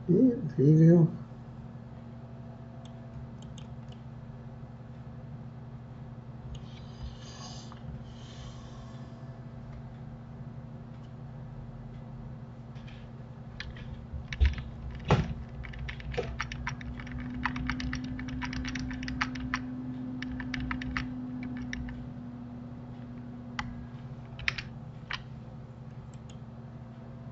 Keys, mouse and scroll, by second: 2.8 click, 3.9-6.9 middle drag, 14.5 ctrl+z, 14.7-17.6 ctrl+z, 24.5 ctrl+shift+s.